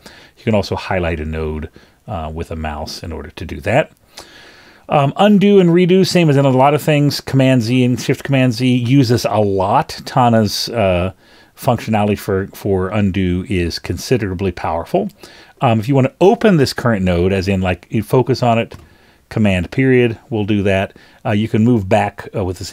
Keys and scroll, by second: 7.1 scroll down 2, 18.8 super+..